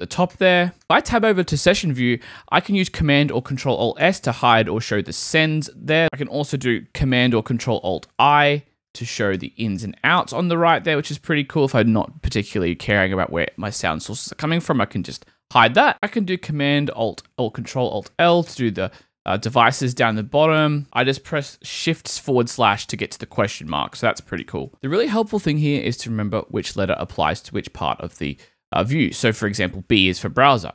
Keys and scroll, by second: 0.8 Tab, 4.0 alt+super+s, 5.3 alt+super+s, 8.4 alt+shift+super+i, 15.1 alt+super+i, 18.0 alt+super+l, 20.2 alt+super+l, 20.8 shift+/, 23.3 shift+/, 24.2 shift+/.